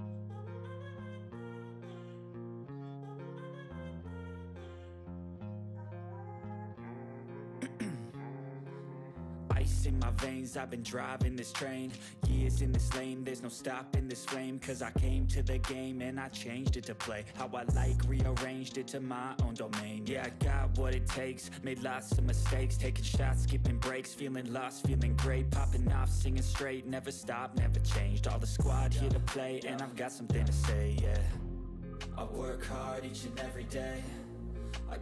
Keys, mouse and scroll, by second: 0.4-2.6 typing, 3.7 click, 5.9 ctrl+x, 6.6-8.6 typing, 11.0-12.2 typing, 12.5 Return, 13.1 ctrl+v, 14.6 Return, 16.2-17.9 typing, 18.1 Return, 19.4 /, 19.9 click, 20.9-22.1 typing, 22.1 click, 23.6 alt+shift+Down, 26.5 alt+shift+Down, 26.5 click, 29.4-31.5 typing, 31.7 click, 32.7-34.5 typing.